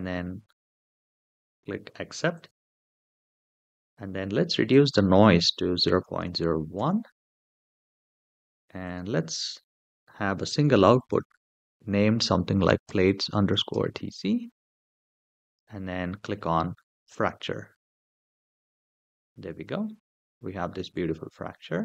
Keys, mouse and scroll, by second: 2.1 click, 2.2 typing, 4.5-6.6 drag, 7.5-8.4 scroll down 3, 8.6 click, 9.1-15.2 drag, 16.9 click, 19.6-21.8 middle drag.